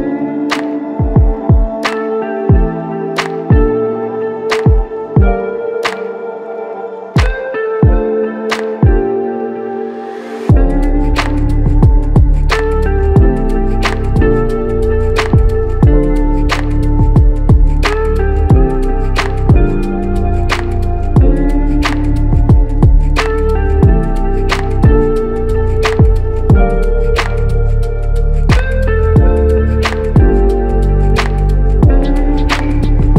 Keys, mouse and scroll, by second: 11.5 alt+click, 14.1 ctrl+z.